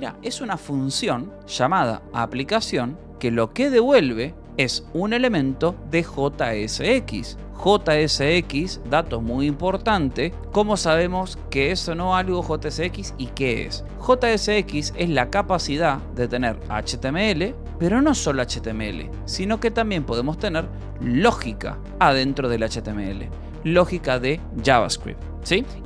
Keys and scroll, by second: 9.0 Escape, 13.6-14.5 typing, 15.5 j, 16.3 j, 17.5 j, 18.3 k, 19.0 Escape, 19.3 k, 20.8 e, 21.8 v, 22.3 e, 24.0 h, 25.6 Escape.